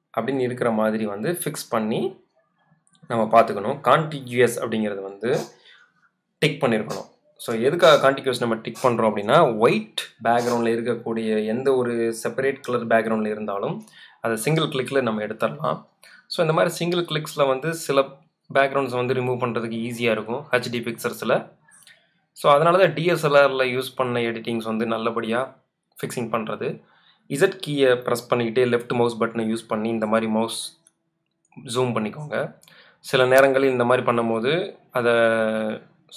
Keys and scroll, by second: 19.9 z, 27.4 space, 33.2 super+z.